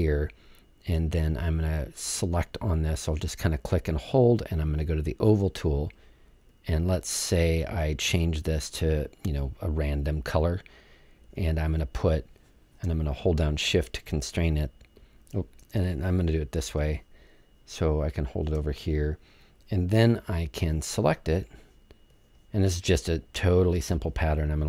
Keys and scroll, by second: 15.7 super+z, 17.1 super+z.